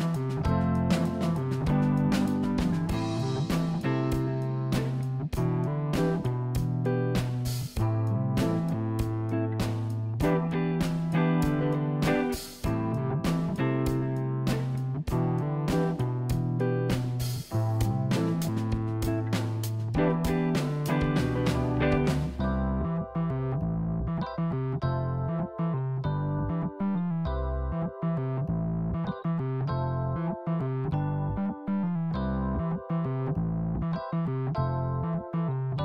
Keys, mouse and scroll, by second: 0.1 Tab, 0.3 click, 0.6-2.3 middle drag, 4.3-4.9 scroll down 1, 4.9-5.4 scroll up 3, 5.4 click, 7.0 KP_1, 7.5-7.9 scroll down 2, 8.9 click, 12.4 click, 13.4 click, 14.1 click, 16.8 click, 19.0 click, 22.4 click, 25.4 click, 28.5 click, 29.5-31.2 middle drag, 33.9-34.2 scroll down 2, 34.2-35.3 middle drag, 35.3 KP_1.